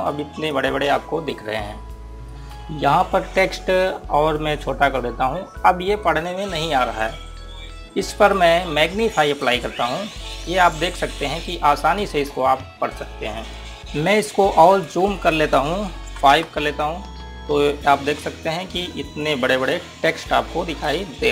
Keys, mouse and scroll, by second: 5.0 scroll down 1, 9.1 click, 13.8 KP_3, 14.0 KP_Enter, 15.2 click, 16.8 KP_5, 17.1 KP_Enter, 20.0 click.